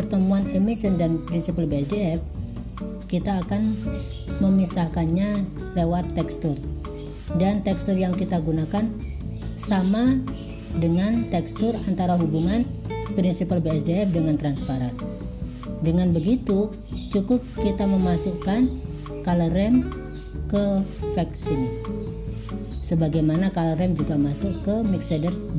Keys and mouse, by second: 1.9-3.5 drag, 4.6-5.2 drag, 5.7 click, 10.8 click, 13.3 click, 14.4 click, 15.9 click, 19.9-22.5 drag.